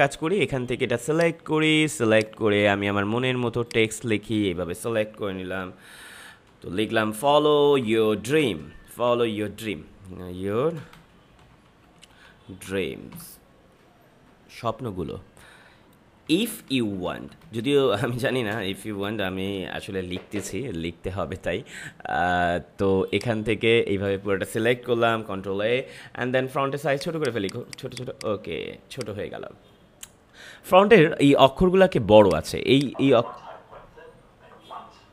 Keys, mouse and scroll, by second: 6.7-9.6 typing, 10.7-13.1 typing, 16.2-19.4 typing, 23.0-25.1 drag, 25.1 ctrl+a, 26.8 click, 30.0 click, 32.2 click.